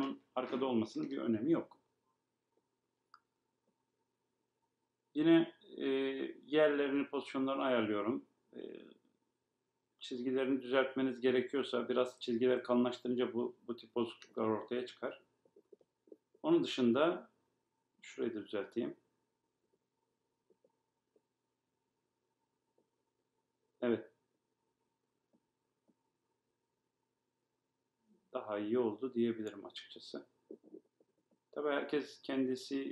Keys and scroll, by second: 27.3 Left.